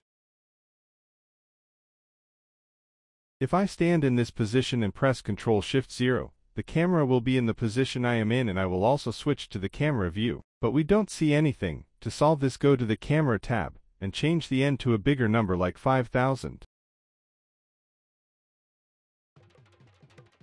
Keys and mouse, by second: 0.8 click, 2.0 middle click, 2.5-2.9 shift+middle drag, 2.9 z, 3.4-4.0 shift+middle drag, 4.2 shift+middle click, 4.9-6.7 shift+middle drag, 7.6 ctrl+alt+KP_0, 8.7-9.3 drag, 10.9-11.9 drag, 12.5-13.5 drag, 13.1 0, 14.2 g, 15.8 g, 16.7 g, 18.7-19.8 drag, 20.2-20.4 drag.